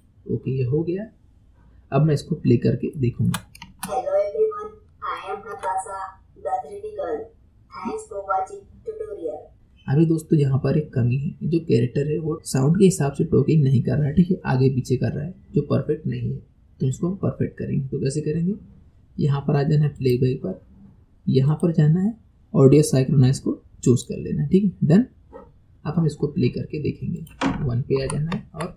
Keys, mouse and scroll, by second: 1.1-2.4 scroll down 2, 2.4-2.9 scroll up 2, 2.9-3.6 shift+middle drag, 3.6 space, 5.2-8.2 shift+middle drag, 20.0-22.3 drag, 27.1-28.7 drag.